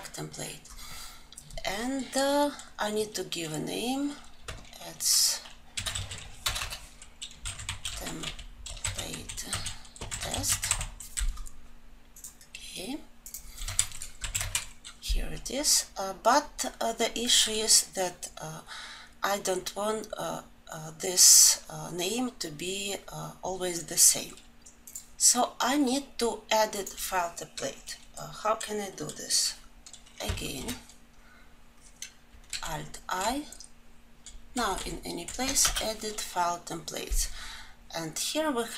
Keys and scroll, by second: 30.5 alt+1, 32.6 alt+Insert.